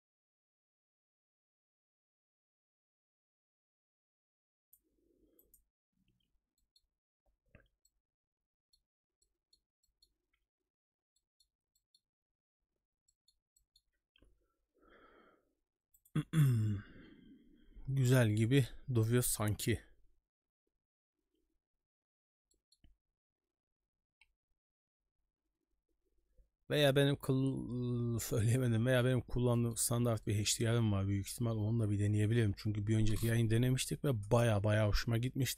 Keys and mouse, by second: 6.6 middle click, 7.8 middle click, 9.2 middle click, 9.8 middle click, 11.1 middle click, 11.7 middle click, 13.1 middle click, 13.6 middle click, 22.5 middle click, 29.5 middle click, 30.2 middle click.